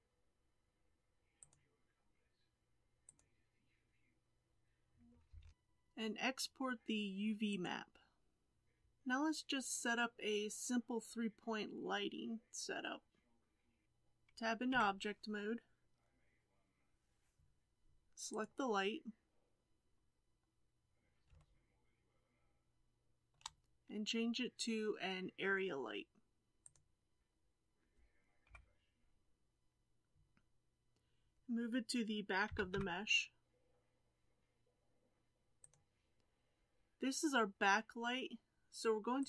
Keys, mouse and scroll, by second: 5.4 alt+a, 11.3-13.5 scroll down 7, 14.7 Tab, 18.4 click, 19.0-20.2 scroll down 5, 20.5 scroll down 1, 21.4-26.6 shift+middle drag, 26.6 click, 28.4 KP_7, 32.5 g.